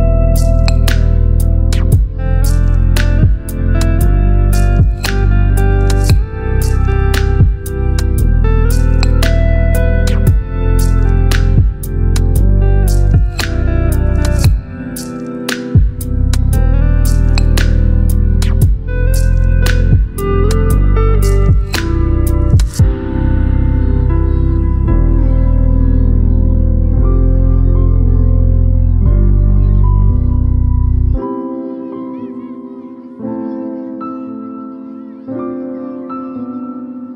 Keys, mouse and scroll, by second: 5.8-8.2 alt+shift+drag, 9.6 ctrl+t, 10.9 right click, 12.6 click, 13.6 right click, 14.8 click, 17.0-18.4 shift+drag, 22.5 shift+click, 25.3 ctrl+g, 27.8 click, 29.8-33.6 typing, 33.9 Return, 34.4 ctrl+0, 36.6 t.